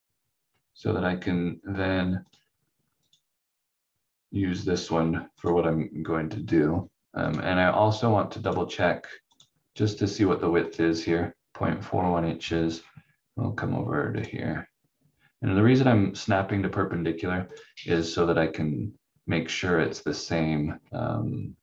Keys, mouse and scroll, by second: 0.1 scroll down 1, 2.2 click, 4.3-4.8 scroll up 1, 7.2 click, 11.8-12.6 scroll down 1, 12.6-14.2 scroll up 1, 14.2 click, 17.4 click, 19.7-20.6 scroll down 1, 20.6-20.9 scroll up 1.